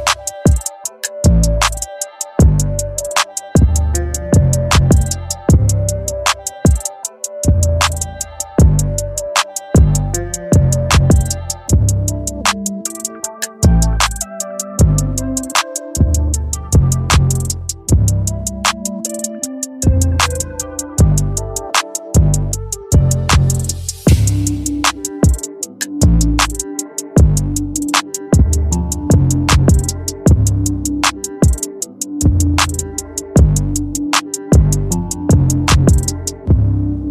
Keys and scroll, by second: 11.7 Return.